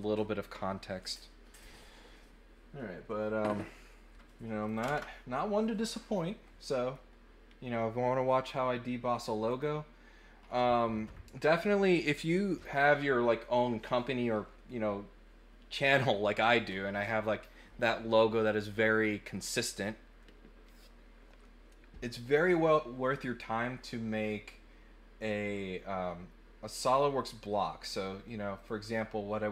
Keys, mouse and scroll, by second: 4.6 click, 6.7 middle click, 9.5 click, 28.6 click.